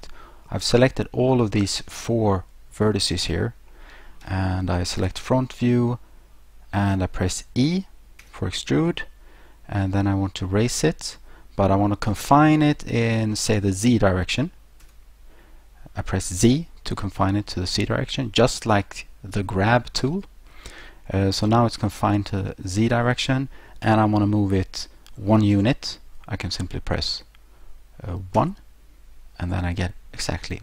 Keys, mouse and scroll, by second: 3.7 middle click, 5.0 1, 8.2 e, 14.8 z, 28.4 1.